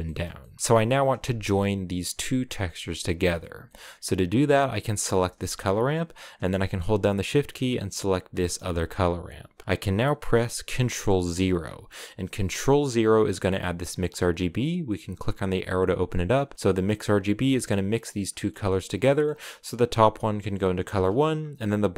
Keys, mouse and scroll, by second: 0.6-1.6 drag, 1.7 ctrl+shift+click, 2.1 ctrl+shift+click, 3.1-4.9 middle drag, 4.9 click, 8.3 shift+click, 15.0 click, 17.3 click, 19.3 click.